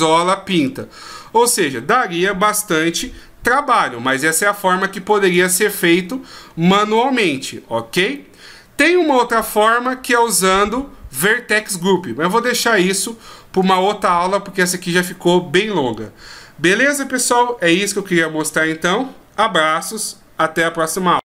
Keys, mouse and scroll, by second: 0.2-1.4 scroll down 3, 0.7-1.4 scroll up 1, 1.4-3.5 scroll down 1, 3.5 scroll down 1, 4.3-4.7 shift+scroll up 2, 4.7-5.5 shift+scroll down 4, 5.5-6.4 ctrl+scroll up 1, 6.4-7.1 scroll up 5, 8.0 scroll down 1, 8.1 middle click.